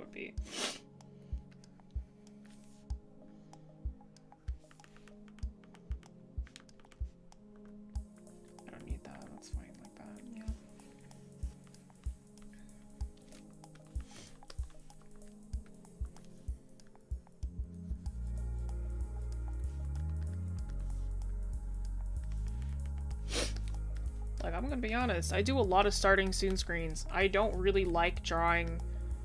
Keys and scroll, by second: 15.1-15.5 scroll up 1, 22.5-23.0 scroll down 1.